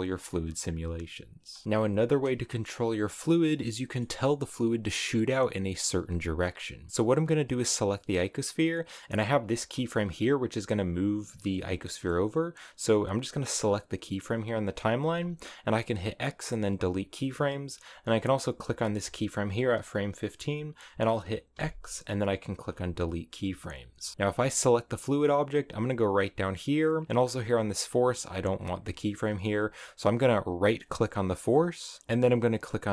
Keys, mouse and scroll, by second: 0.4-1.0 scroll down 2, 1.3 space, 1.5 middle click, 3.7-6.2 middle drag, 6.2 scroll up 1, 7.3-7.6 scroll up 1, 8.9 right click, 9.2-9.6 scroll up 8, 10.2-13.2 drag, 13.2 right click, 14.8 x, 17.8 click, 18.2 right click, 21.4 x, 24.2 right click, 25.6-27.8 drag, 27.8-30.7 scroll down 1, 30.7-32.0 right drag.